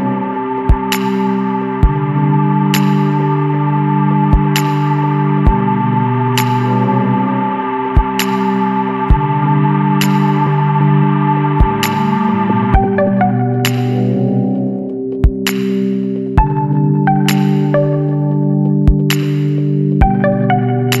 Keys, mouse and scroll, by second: 1.8 scroll down 2, 2.4 middle click, 2.6 click, 3.6-4.8 scroll up 5, 6.0 click, 6.8 BackSpace, 8.3 KP_0, 8.6 KP_Decimal, 8.9 KP_5, 11.1 click, 11.8 scroll down 1, 13.2-17.4 middle drag, 13.4-17.4 drag, 17.6-17.9 scroll up 1, 18.4 scroll down 1.